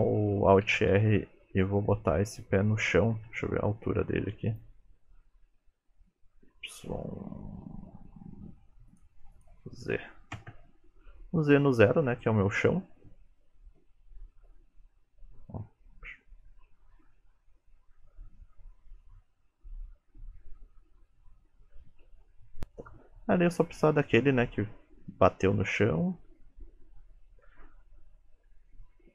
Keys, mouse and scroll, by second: 0.7 alt+r, 3.4 n, 4.5 click, 6.8 click, 9.4 click, 14.4 click, 19.3 click, 19.8 shift+middle click, 20.5 click.